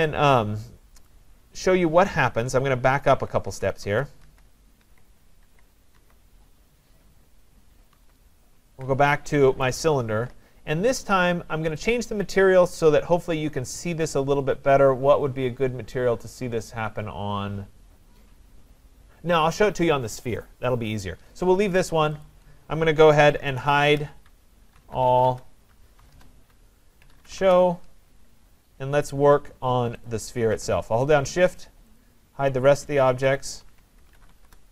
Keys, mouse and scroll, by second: 1.1 right click, 3.1 ctrl+z, 3.5 ctrl+z, 3.9 ctrl+z, 4.3 ctrl+z, 4.9 ctrl+z, 5.5 ctrl+z, 6.0 ctrl+z, 8.0 ctrl+z, 9.7 right click, 11.8 click, 22.3 click, 23.2-25.5 typing, 23.8 click, 26.1 Return, 26.8-28.0 typing, 30.1 click, 31.1 click, 31.6 click, 32.0 click, 32.9 click, 33.4 click, 34.4 Return.